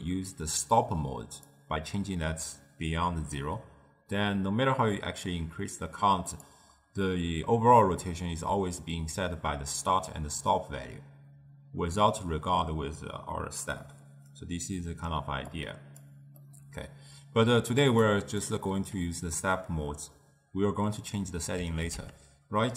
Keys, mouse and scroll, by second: 5.0-8.1 drag, 15.6 click, 16.5-18.2 middle drag, 18.2 click, 21.9 ctrl+a.